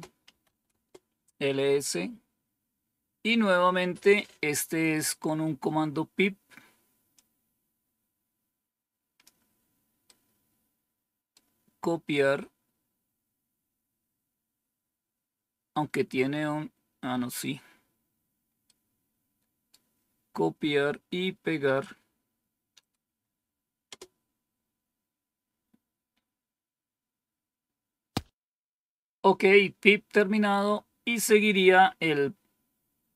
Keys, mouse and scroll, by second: 0.0-0.9 typing, 7.0-9.2 drag, 10.0-11.3 right drag, 15.0-17.0 scroll down 3, 17.0 scroll up 2, 18.5-19.6 right drag, 21.7-22.8 right drag, 23.8 Return.